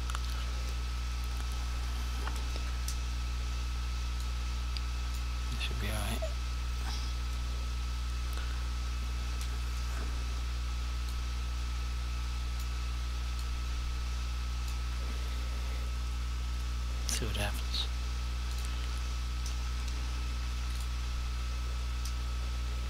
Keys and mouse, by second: 4.3 click, 11.2 click, 13.5 click, 18.5 click, 20.8 click.